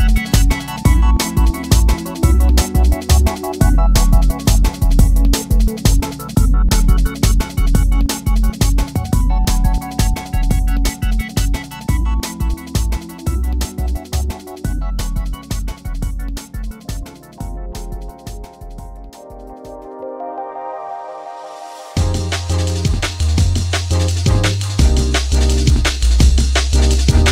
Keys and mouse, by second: 2.7 click, 3.9 click, 6.6 click, 7.4 click, 7.9 click, 12.8-14.0 drag, 15.5 click, 17.3 click, 21.0 click, 22.0 click, 26.0 Escape.